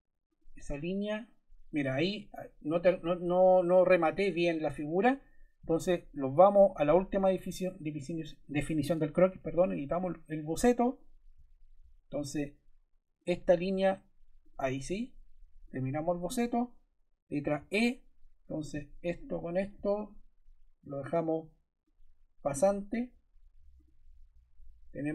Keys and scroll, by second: 17.5 e.